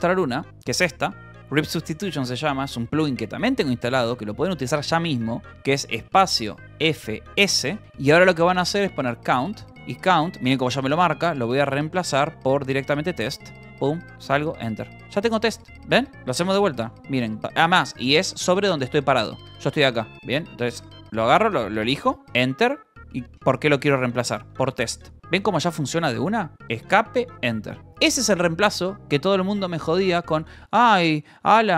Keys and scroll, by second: 0.0 s, 2.2 q, 3.1 Escape, 3.4 BackSpace, 4.1 q, 6.2-11.7 typing, 11.2 Tab, 11.9 Return, 12.8 t, 13.5 Tab, 14.0 Escape, 14.3 Return, 14.9-20.7 typing, 17.7 Escape, 20.2 Escape, 22.2 Return, 24.4-25.6 typing, 26.8 Escape, 27.3 Return, 27.6-28.5 typing.